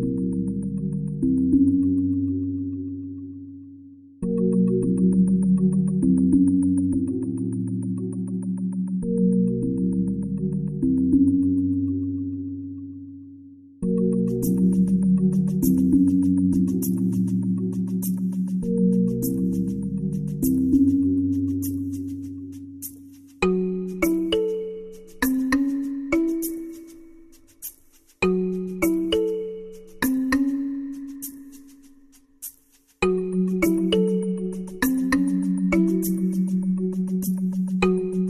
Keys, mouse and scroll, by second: 1.8 click, 2.8 click, 3.1-4.3 middle drag, 4.5 Tab, 6.3 BackSpace, 6.4 BackSpace, 6.6 BackSpace, 6.9 BackSpace, 8.4 shift+n, 9.8 o, 10.1 r, 11.4 d, 11.8 i, 12.0 c, 13.3 shift+b, 13.4 a, 14.0 l, 14.8 t, 17.8-19.0 drag, 19.6-20.7 drag, 22.4 Tab, 24.1-25.8 drag, 27.4-30.0 drag, 35.0 click, 35.2-38.2 drag.